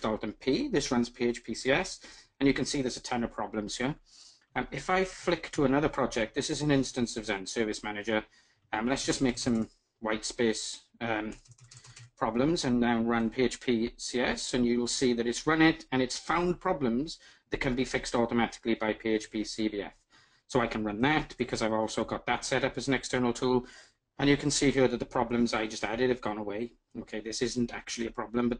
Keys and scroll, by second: 5.0 alt+super+`.